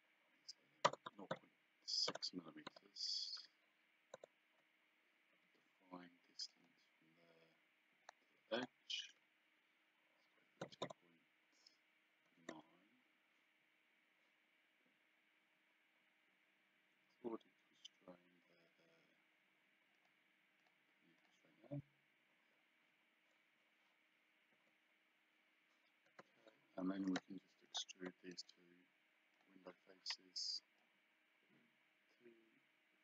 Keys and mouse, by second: 0.9 KP_0, 2.1 BackSpace, 2.7 KP_6, 4.2 KP_Enter, 6.5 click, 8.1 click, 10.6 KP_2, 12.3 KP_9, 12.5 KP_Enter, 20.0 click, 24.5 KP_Enter, 26.7 Escape, 27.1 click, 28.3 right click, 29.4 click, 30.8 click.